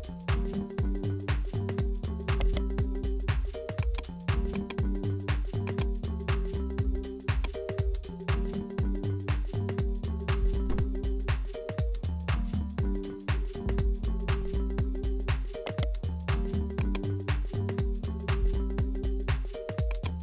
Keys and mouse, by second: 0.2 ctrl+z, 0.9 ctrl+z, 2.5 right click, 3.8-7.3 drag, 10.8-13.7 drag, 15.7 right click, 16.9-19.1 drag, 19.9 click.